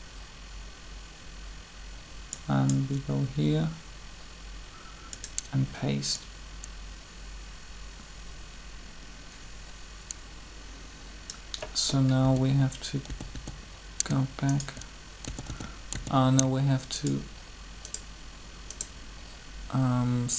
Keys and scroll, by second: 12.2-13.1 typing, 15.8 typing.